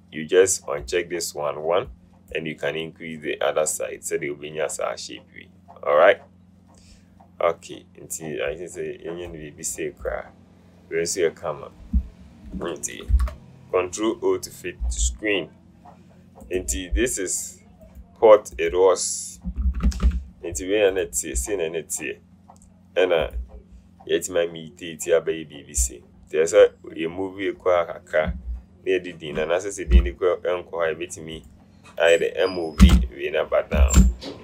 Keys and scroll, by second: 13.3 ctrl+0, 19.7 Up, 19.9 Up, 20.1 Up, 20.2 Up, 30.0 alt+t, 33.2 Return.